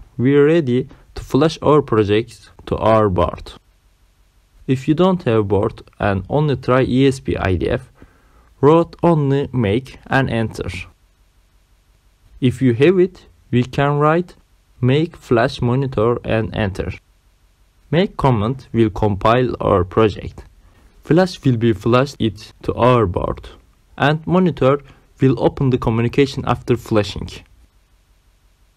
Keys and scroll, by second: 6.4-8.7 typing, 7.9 Caps_Lock, 11.3 space, 12.6-15.8 typing, 16.1 Return.